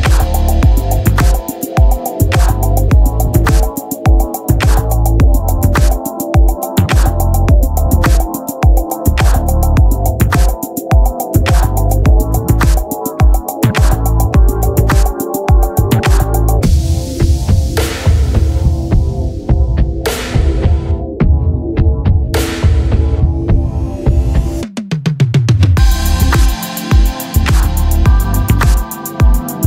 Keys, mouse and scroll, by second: 1.9 x, 5.2 ctrl+r, 6.4-7.5 right drag, 7.0 b, 8.1 x, 10.3-12.1 drag, 19.5 z, 21.6 z, 23.2 ctrl+Tab, 24.0 right click, 25.0 f, 25.3 click, 25.5-28.2 drag, 26.6 f, 27.8 f, 28.2 z, 29.4 a, 29.5 a.